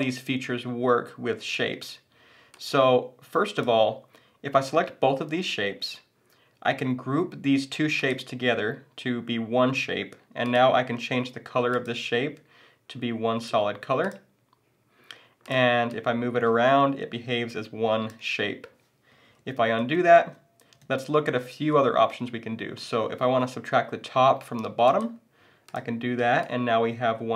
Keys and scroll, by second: 19.5 super+z.